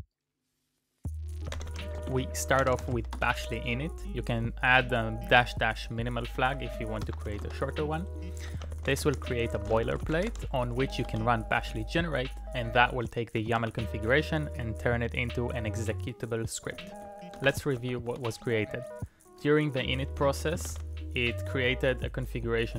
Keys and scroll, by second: 1.3-3.4 typing, 6.2-11.6 typing, 13.1-14.1 typing, 16.5 Tab, 16.5 Return, 16.5-18.0 typing, 18.1 Return, 20.0 Tab, 20.0 Return, 20.4-21.2 typing.